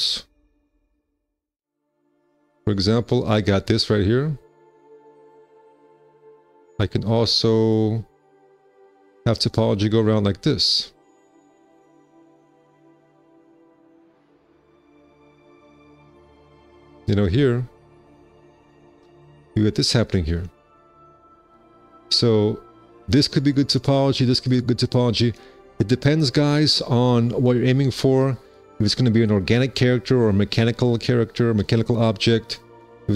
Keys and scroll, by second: 6.3 q, 8.1 `, 8.3 1, 9.5 alt+c, 14.8 shift+w, 16.2 shift+w, 19.8 4, 20.0 q, 21.6 4.